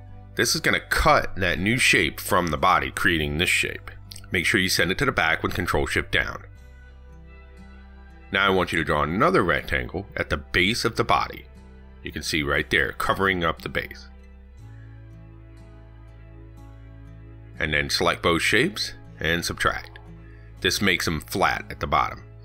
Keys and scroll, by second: 3.4 ctrl+z, 4.4 ctrl+shift+Down, 15.6 ctrl+c, 15.8 ctrl+v.